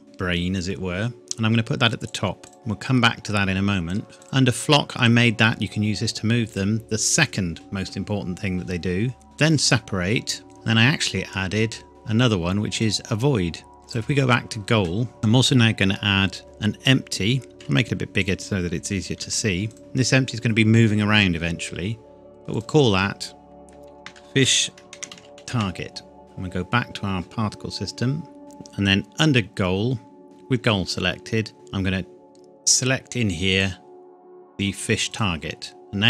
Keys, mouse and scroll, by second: 2.0 click, 4.2 click, 10.5 click, 11.9 click, 13.8 click, 15.2 shift+a, 17.5 s, 18.2 click, 19.2 g, 19.7 click, 22.3 click, 23.8-25.6 typing, 26.2 click, 30.2-30.9 scroll down 1, 33.6 click.